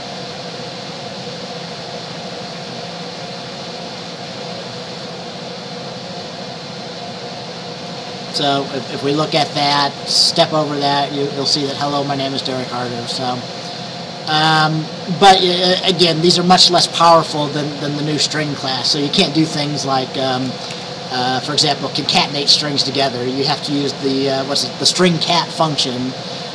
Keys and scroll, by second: 20.8 BackSpace.